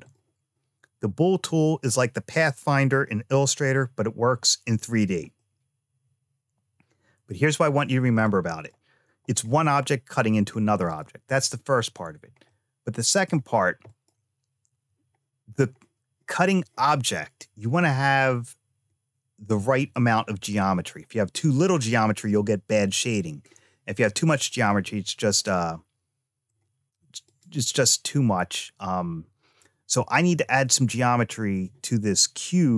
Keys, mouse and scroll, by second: 5.2-7.1 middle drag, 8.1 click, 9.1 click, 10.7 click, 12.3 shift+middle click, 13.7 click, 17.7-20.3 middle drag, 23.2-24.3 scroll down 2, 24.3-26.3 middle drag, 27.1 click.